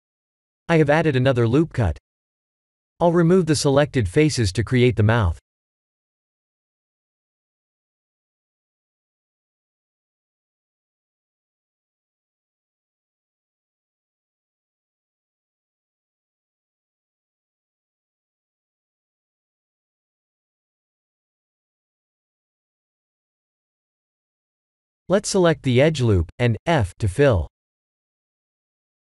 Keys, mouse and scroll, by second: 0.1 click, 0.9 click, 1.4 b, 2.3 x, 3.9 middle click, 4.8-5.4 scroll down 7, 5.5 shift+z, 5.8 middle click, 7.5 middle click, 8.6 click, 9.2 s, 10.0 x, 11.2 middle click, 12.2 middle click, 12.5-13.0 scroll up 5, 13.3 middle click, 13.9 middle click, 14.0 middle click, 14.4 middle click, 14.6 middle click, 18.3 click, 19.3 shift+click, 19.8 f, 20.3 middle click, 21.0 ctrl+z, 21.3 middle click, 21.9 middle click, 22.7 shift+click, 23.2 f, 23.7 middle click, 24.3 middle click, 24.6 middle click, 25.1 middle click, 25.1 middle click, 25.4 2, 25.8 alt+click, 26.3 f, 27.1 middle click, 27.4 middle click, 27.5 middle click, 27.7 middle click, 28.1 middle click, 28.7 alt+click.